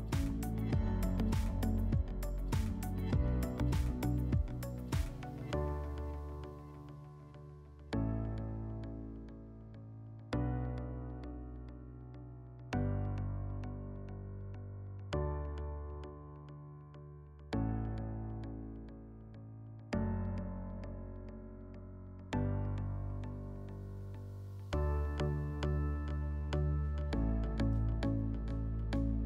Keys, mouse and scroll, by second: 0.0 right click, 0.2 w, 2.1 click, 3.2 w, 4.5 click, 5.5 click, 7.5 s, 8.6 click, 11.1 s, 13.3 click, 14.6 click, 15.8 click, 19.2 click, 20.6 click, 23.4 click, 25.0 click, 26.9 click, 28.0 click.